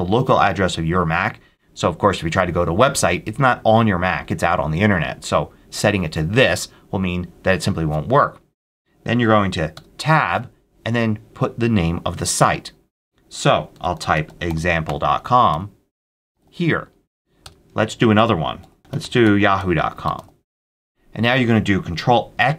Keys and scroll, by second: 9.6 Tab, 13.4-19.0 typing, 17.3 Return.